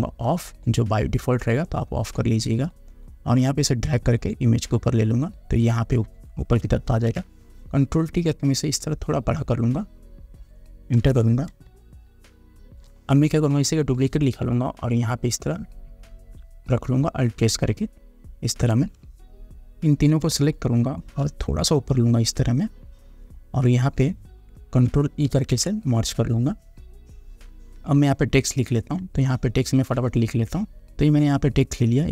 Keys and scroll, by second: 7.1 ctrl+t, 11.1 Return, 11.8 space, 25.5 ctrl+e.